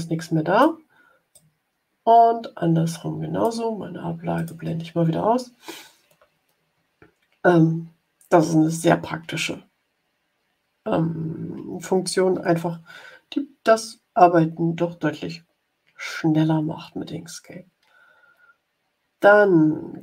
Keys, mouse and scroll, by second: 1.2-3.5 drag, 4.3 click.